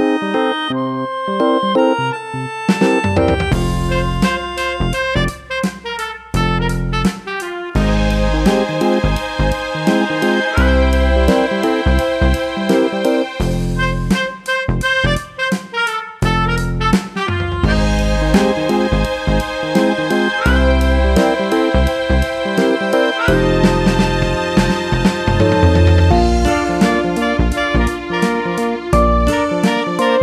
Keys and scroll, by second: 27.1 super+c, 27.1 super+v.